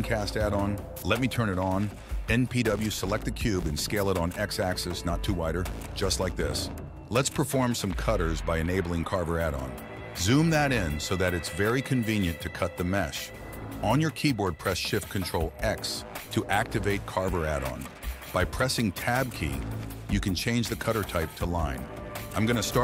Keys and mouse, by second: 0.0 n, 1.1 s, 2.7 s, 5.0 g, 9.3 ctrl+a, 13.2 ctrl+shift+x.